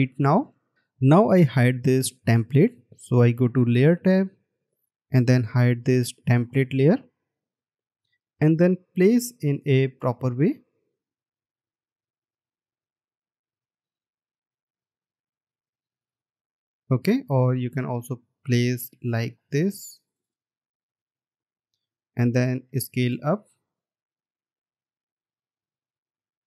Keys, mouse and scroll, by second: 9.5-10.1 alt+scroll down 1, 10.2 alt+scroll down 1, 10.8 space, 22.0 double click, 24.2 shift+click.